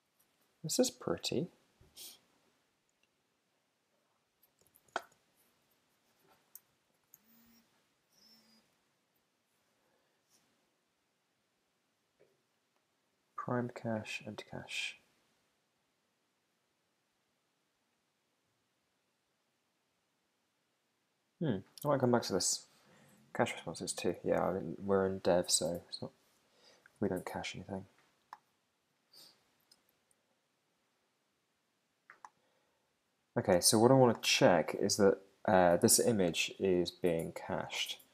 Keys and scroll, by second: 6.9 ctrl+alt+super+Up, 25.0 super+`, 26.2 super+Tab, 37.5 super+`.